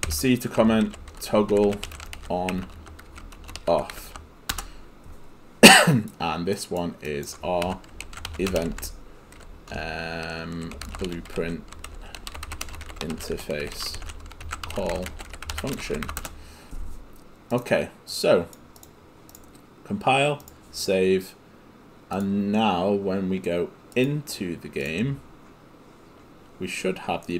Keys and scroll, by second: 0.6-4.5 typing, 4.6 Return, 7.8-16.6 typing.